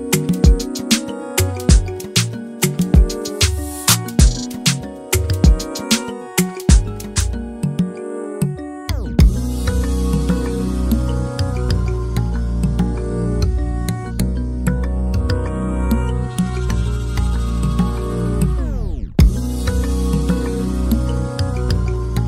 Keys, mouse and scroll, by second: 0.5 click, 2.5 alt+a, 3.0 scroll down 1, 3.2-3.6 scroll up 3, 3.6-4.1 middle drag, 4.1 click, 4.5 shift+click, 5.4 alt+d, 6.6 r, 10.8 click, 12.9 click, 13.7-14.1 scroll down 2, 14.7 click, 15.9 click, 18.4 r, 21.7 alt+d.